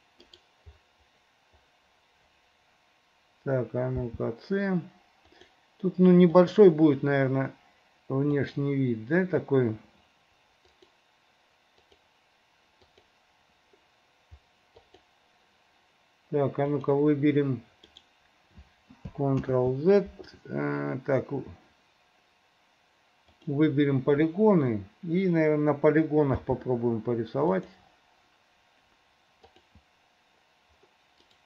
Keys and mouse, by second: 4.1 c, 19.7 ctrl+z, 23.4 middle click, 26.4 c, 27.7 click.